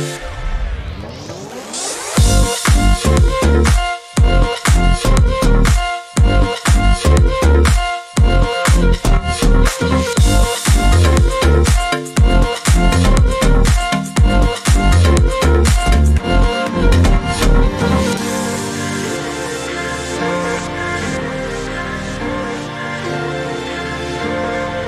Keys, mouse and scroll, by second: 0.0 shift+click, 0.5 shift+click, 1.1 shift+click, 1.6 shift+click, 2.2 shift+click, 3.9 ctrl+g, 4.8 ctrl+shift+click, 5.3 shift+right click, 6.9 click, 8.9 click, 10.3-10.7 ctrl+scroll down 2, 11.2 ctrl+scroll down 2, 12.4 ctrl+KP_5, 16.4-17.2 ctrl+scroll up 4, 19.1 click, 19.8 click, 22.0 click, 23.3 click, 24.6 click.